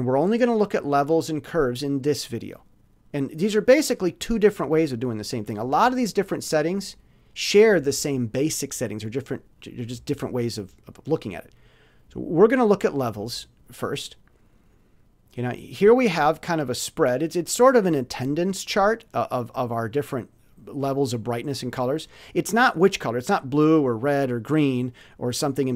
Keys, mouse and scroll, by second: 13.4 click.